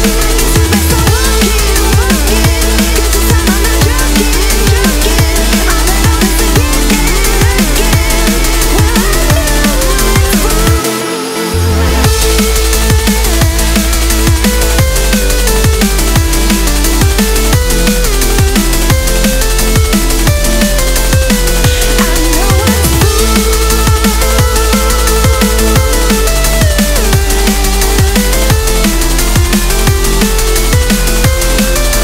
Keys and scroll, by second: 3.5 ctrl+z.